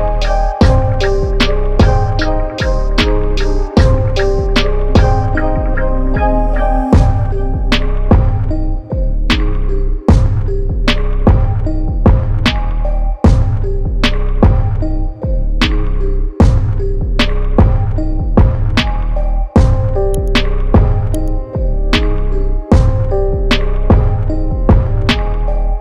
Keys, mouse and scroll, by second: 2.1 click, 5.0 click, 7.2 right click, 9.7 click, 12.0 click, 16.6 m, 18.2 click, 21.4 click.